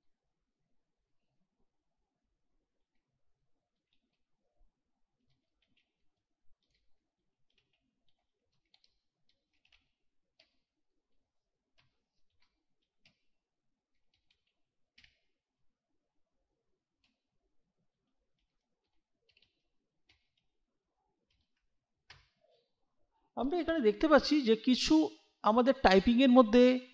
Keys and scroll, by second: 2.8-10.9 typing, 11.8 Return, 12.4-15.0 typing, 17.1-20.1 typing, 21.3 ., 22.1 Return.